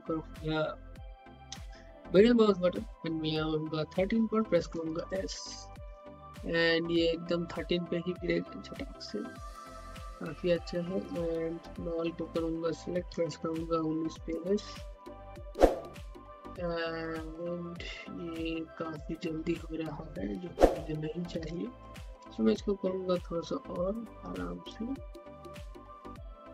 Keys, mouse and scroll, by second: 2.1-4.6 middle drag, 4.6-9.6 typing, 10.9 click, 13.0-21.3 typing, 22.0 shift+click, 22.3-24.0 middle drag, 24.0-26.5 drag.